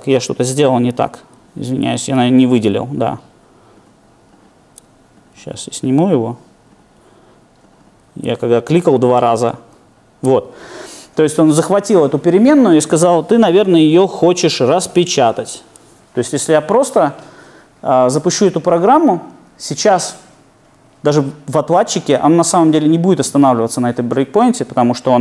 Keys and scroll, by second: 3.2 super+F8, 9.6 super+F8.